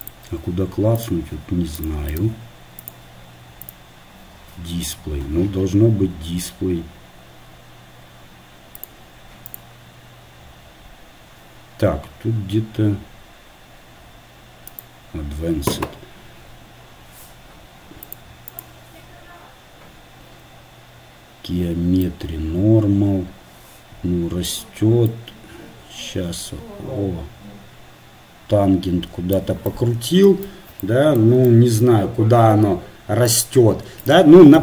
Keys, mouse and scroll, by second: 25.3-26.9 drag, 29.7-33.4 middle drag.